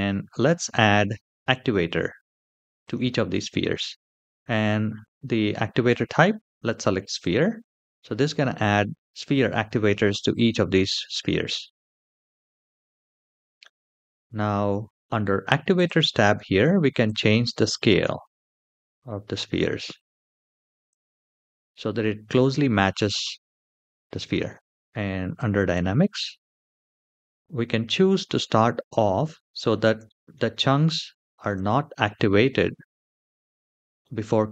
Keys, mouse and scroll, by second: 2.6-7.4 drag, 12.3-13.9 scroll down 2, 13.9-15.5 scroll down 4, 15.5 click, 15.5 scroll down 1, 16.8-19.1 drag, 20.1 click, 20.6 click, 21.0 click, 22.2-23.8 scroll up 3, 24.0 shift+middle click, 25.0 click, 29.0 shift+middle click, 29.8 shift+middle click, 30.3 middle drag, 30.9 shift+middle drag, 32.3-32.9 scroll down 1, 32.9-33.3 scroll down 2, 33.3 shift+middle drag, 33.8 middle click.